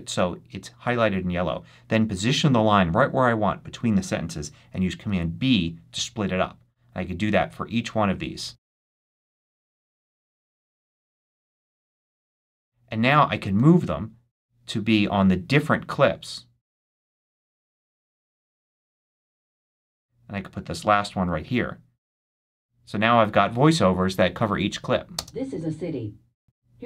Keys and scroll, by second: 4.9 super+b, 9.0 super+b, 11.3 super+b, 25.0 space.